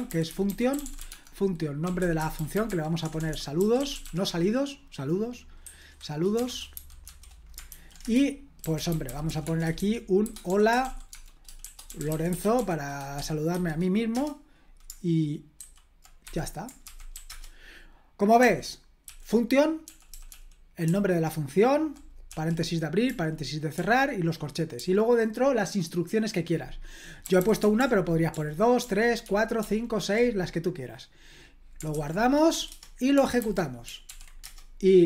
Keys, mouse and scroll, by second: 0.0-4.5 typing, 5.6-13.5 typing, 8.0 Return, 14.1 Return, 15.6 typing, 16.2 Escape, 16.9 typing, 17.3 Return, 18.4-22.3 typing, 23.7 typing, 24.8 j, 27.2-30.1 typing, 31.9-32.5 typing, 32.7 Return, 33.4 super+h, 34.1 ctrl+p, 34.4 Return.